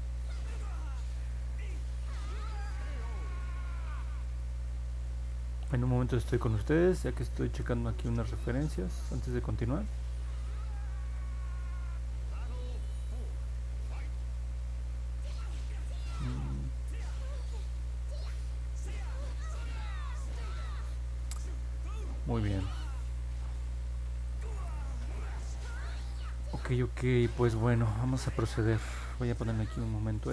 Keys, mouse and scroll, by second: 0.1 scroll down 1, 0.2-0.7 scroll up 2, 1.3-1.8 scroll down 2, 2.2 middle click, 3.4 middle click, 5.0 middle click, 6.4 middle click, 7.2 middle click, 8.4 middle click, 8.7 scroll down 1, 9.2 middle click, 9.7 scroll down 1, 10.4 middle click, 11.3-12.0 scroll up 2, 12.5 middle click, 13.5 middle click, 14.3 middle click, 14.6 middle click, 15.2-16.2 middle drag, 17.2 scroll down 1, 17.8 scroll up 1, 17.9 middle click, 18.6 scroll up 1, 19.2 scroll up 1, 19.7-20.7 middle drag, 20.9 middle click, 21.4-22.8 middle drag, 24.1 click, 29.0-30.3 alt+drag.